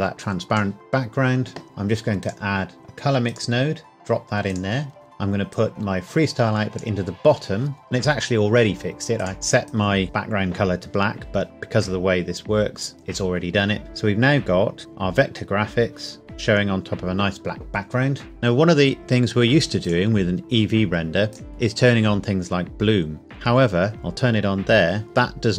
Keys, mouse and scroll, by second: 3.3 click, 5.5 click, 9.2 click, 12.5-13.8 scroll down 1, 19.0 click, 23.9 click.